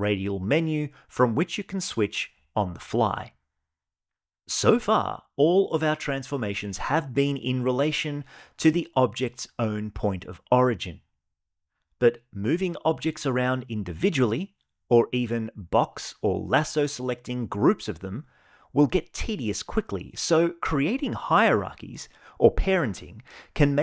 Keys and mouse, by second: 11.5 g, 13.8-15.2 drag, 16.3 g, 18.2-19.2 right drag, 19.2 r, 22.7 ctrl+p.